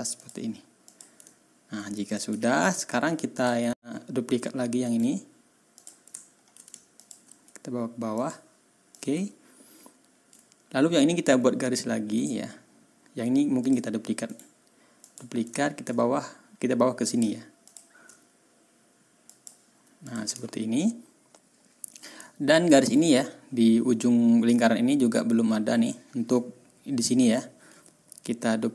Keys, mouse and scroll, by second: 0.1 middle click, 0.9 middle click, 1.2-1.6 ctrl+scroll down 2, 2.5-2.8 ctrl+scroll up 2, 3.9-4.2 ctrl+scroll down 2, 4.8 right click, 5.7 click, 6.2-6.5 ctrl+scroll up 2, 6.9 ctrl+shift+click, 8.1 click, 8.9 click, 9.2-9.5 ctrl+scroll down 2, 9.9 ctrl+scroll up 2, 12.1 click, 13.6 click, 14.2 right click, 15.0 click, 15.5-15.8 ctrl+scroll up 2, 17.6 shift+click, 19.2 click, 20.0 click, 20.4-21.2 ctrl+scroll down 4, 21.4-21.7 ctrl+scroll up 2, 22.2 ctrl+scroll down 2, 22.6-22.9 ctrl+scroll up 2, 25.9 ctrl+scroll up 2, 27.4 ctrl+scroll down 2.